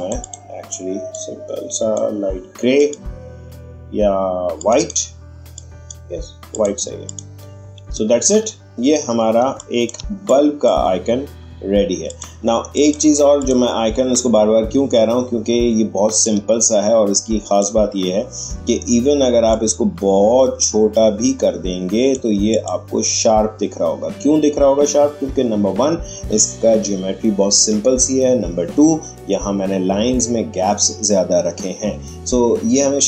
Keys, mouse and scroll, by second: 8.1-8.7 alt+scroll up 1, 9.0-9.4 alt+scroll down 1, 9.4 space, 9.5-12.0 drag, 16.2-19.5 drag, 19.5-22.5 shift+drag.